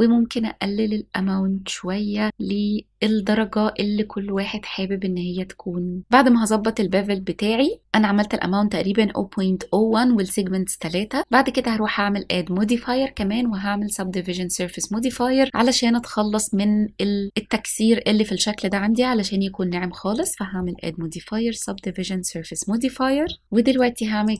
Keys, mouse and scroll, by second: 11.6-15.3 drag, 20.2-21.8 drag, 23.7-24.3 right drag.